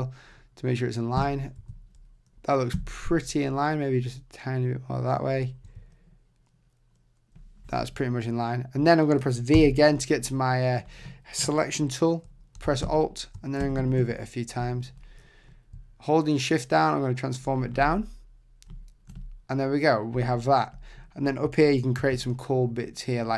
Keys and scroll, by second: 1.2 Right, 1.6 Left, 2.7 Right, 5.6 Left, 12.8 alt+Right, 13.6 Right, 22.0 shift+b.